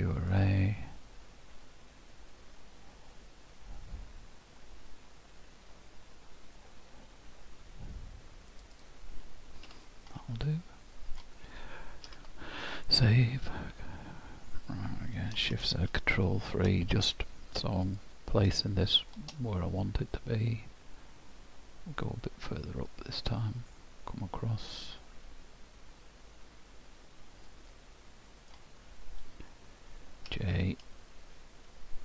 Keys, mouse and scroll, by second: 8.7 click, 9.7 h, 10.2 middle click, 12.1 ctrl+w, 15.5 shift+z, 16.3 ctrl+KP_3, 17.9 click, 18.7 shift+middle click, 22.5 click, 25.7-27.7 scroll up 1, 27.7 middle click.